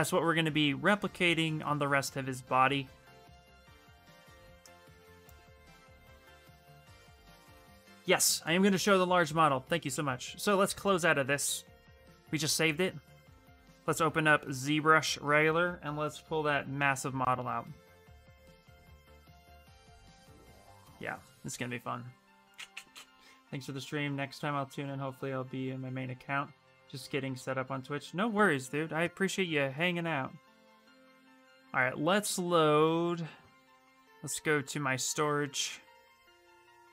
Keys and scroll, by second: 4.1 Return, 4.3 Return.